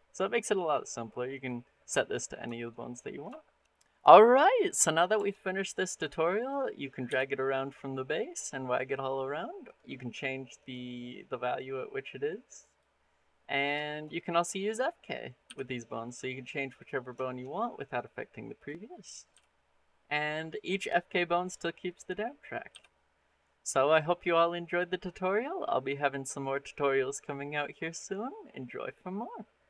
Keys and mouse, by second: 1.1 click, 2.3 shift+middle click, 2.6 middle drag, 3.2 shift+middle click, 4.6 middle drag, 5.0 shift+middle click, 5.4 middle drag, 6.2 click, 6.6 middle click, 6.9 r, 9.5 click, 10.4 click, 11.4-12.6 drag, 13.4 click, 13.7 shift+middle click, 14.5 click, 14.8 middle click, 15.3 r, 18.4 click, 19.1 r, 21.7 click, 22.1 click, 22.1 right click, 22.2 middle click, 22.5 r, 26.2 click.